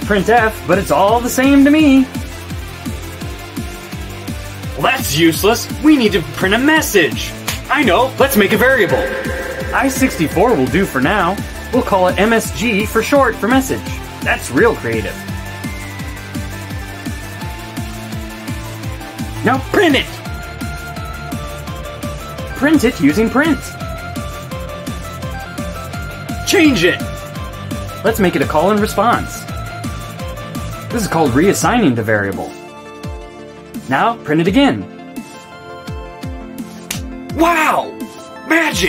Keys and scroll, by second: 0.9-3.9 typing, 10.1-15.8 typing, 16.9 shift+1, 17.1 shift+', 17.7 ;, 18.8 Return, 20.6 Return, 22.3-24.8 typing, 27.5-35.7 typing, 36.0 Return.